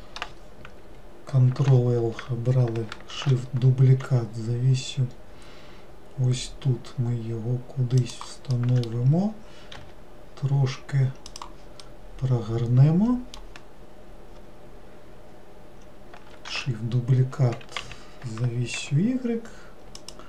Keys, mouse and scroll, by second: 1.7 ctrl+l, 3.2 shift+d, 8.6-9.8 middle drag, 9.8 r, 11.9-14.9 middle drag.